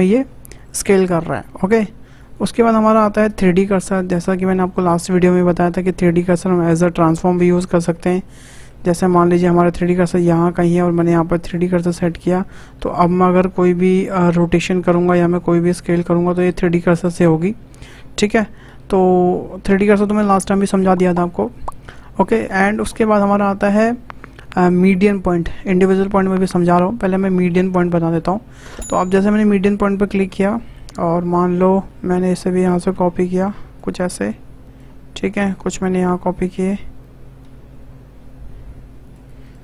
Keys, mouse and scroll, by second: 2.1-5.3 drag, 8.0-8.4 scroll down 2, 8.4-9.8 shift+middle drag, 9.8-11.0 shift+right drag, 11.0-14.0 drag, 14.1 r, 15.4 s, 22.2-23.4 drag, 30.2 scroll up 2, 30.6 shift+middle drag, 30.9 scroll down 4, 31.3 click, 31.8 shift+d, 31.9 y, 34.1-34.7 scroll down 1, 34.7 click, 35.8 shift+d, 38.8 y, 39.5 click.